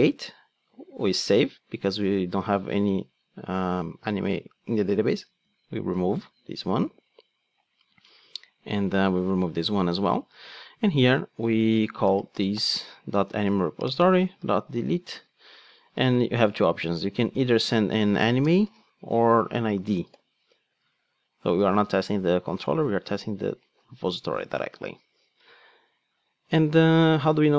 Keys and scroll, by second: 6.2 super+x, 10.1 Tab, 13.2 Return, 15.2 super+z, 16.1 ctrl+space, 18.9 super+p, 20.7 Return.